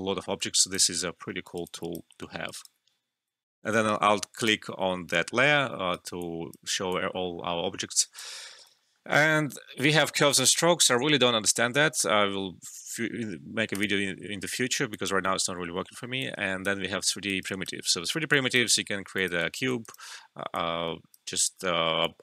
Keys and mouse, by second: 1.1 alt+middle click, 1.4 alt+right click, 1.6 alt+click, 2.2 alt+middle click, 2.4 alt+right click, 3.4 alt+F12, 4.0 typing, 4.3 alt+click, 5.7 alt+middle click, 5.7 typing, 5.9 alt+right click, 6.2 alt+click, 6.9-8.7 alt+drag, 8.7 alt+middle click, 13.7 click, 14.5 alt+middle click, 14.9 alt+click, 15.9 alt+middle click, 16.2 alt+click, 17.2 alt+right click, 17.4 alt+click, 17.7 typing, 19.8 alt+right click, 20.5-22.0 drag.